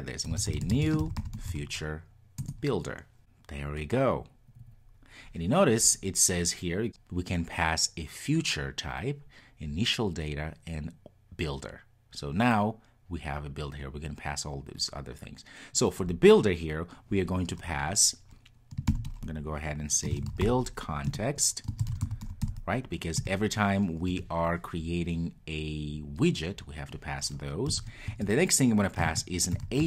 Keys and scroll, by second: 21.2 Return.